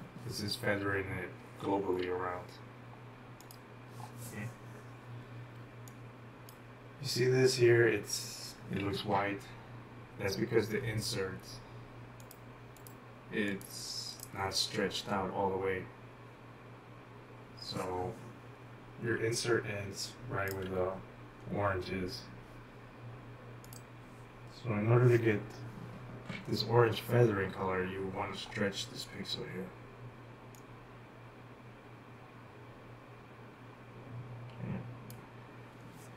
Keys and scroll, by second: 5.6-7.3 typing, 8.9 typing, 19.2-20.3 typing.